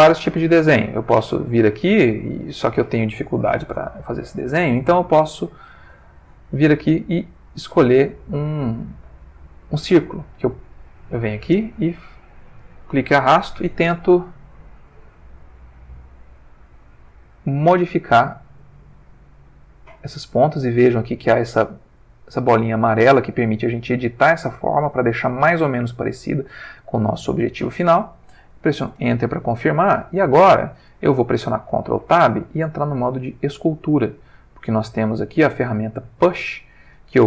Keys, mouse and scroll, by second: 3.9 ctrl+z, 5.6 click, 10.7-12.8 drag, 15.4-16.9 drag, 17.4-18.8 drag, 19.4-21.5 drag, 22.1-25.1 drag, 25.9-27.5 drag, 28.9 Return, 32.0 ctrl+Tab, 33.3 click.